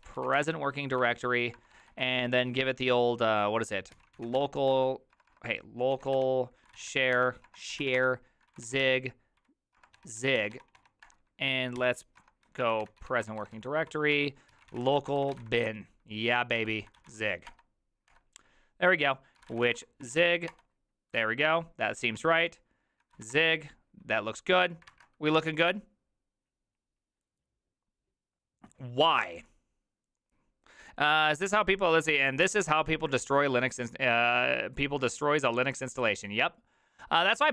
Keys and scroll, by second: 0.0-2.0 typing, 3.7-20.7 typing, 22.8-25.4 typing.